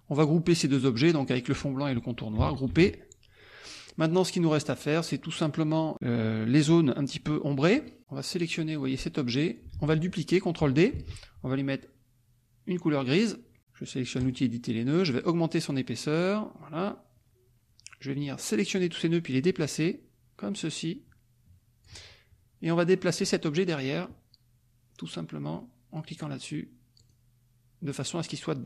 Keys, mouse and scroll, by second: 2.6 ctrl+g, 3.4-4.9 scroll up 4, 5.3-5.9 scroll up 4, 7.1-7.5 scroll up 2, 7.5 click, 8.2-9.7 drag, 9.7 ctrl+z, 10.9 ctrl+d, 13.1 click, 14.2 click, 15.7-17.0 drag, 18.2 click, 19.6-22.0 drag, 22.7 click, 26.1 click, 27.0 click.